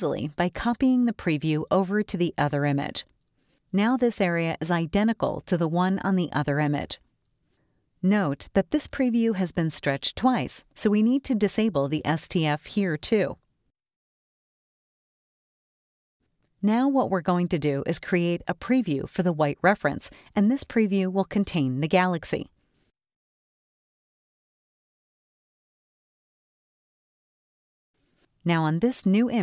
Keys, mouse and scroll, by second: 4.3 click, 7.4 click, 10.0 middle click, 10.0 scroll up 1, 10.0 scroll down 1, 10.2 middle click, 10.2 scroll, 10.3 scroll down 2, 15.9 click, 17.1 middle click, 17.1 scroll, 17.2-17.5 scroll up 4, 18.0 click, 20.2 click, 21.2 scroll down 1, 21.6-22.2 scroll up 1, 22.2 space, 22.3 click, 23.5 scroll up 1, 23.5 scroll down 1, 23.7 space, 23.8 click, 25.1 click, 26.1-28.2 drag, 28.5-29.4 drag.